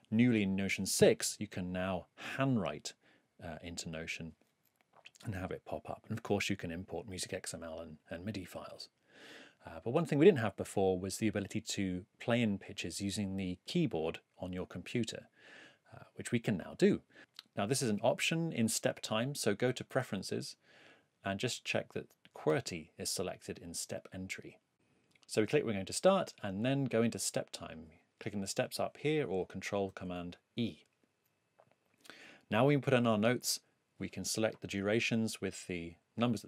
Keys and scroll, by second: 19.9 super+,, 29.9 super+e.